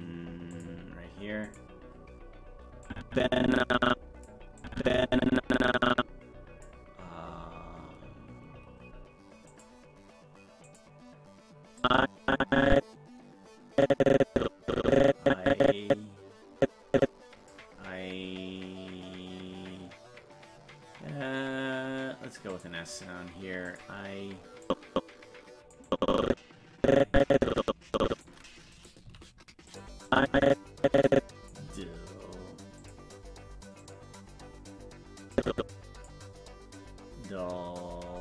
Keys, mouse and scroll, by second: 0.5 click, 1.4 click, 2.9-4.2 drag, 4.6-6.6 drag, 9.5 click, 10.6 click, 11.8-17.5 drag, 22.5 click, 23.6 click, 24.6-25.7 drag, 25.9-28.2 drag, 28.7 right click, 29.0 g, 30.1-31.5 drag, 32.8 click, 33.8 click, 35.3 click.